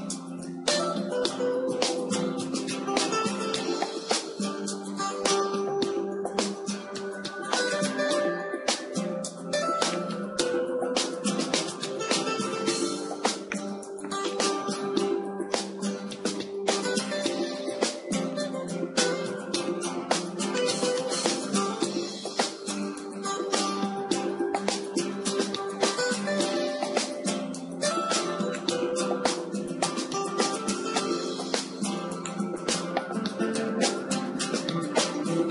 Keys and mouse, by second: 1.3 KP_1, 4.2 KP_3, 6.1 Tab, 9.8-12.3 drag, 12.3 alt+h, 12.3 Tab, 12.7 Tab, 13.1-14.3 middle drag, 14.3 click, 14.4-16.3 middle drag, 16.3 alt+h, 17.7 alt+h, 20.6-22.9 drag, 22.9-28.5 middle drag, 22.9 KP_1, 28.5-31.1 drag, 30.9 r, 31.1-32.3 middle drag, 31.1 r, 32.4-35.3 drag.